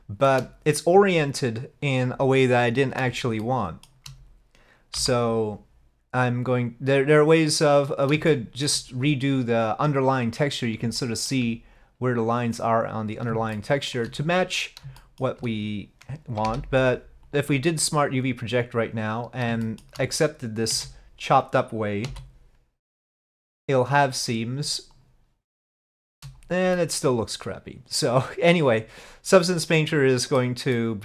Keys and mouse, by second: 3.5 shift+middle click, 5.0 u, 8.3 shift+click, 11.0 shift+click, 13.7 shift+click, 15.1 shift+click, 16.5 u, 19.8-21.4 shift+drag, 20.7 s, 22.1 g.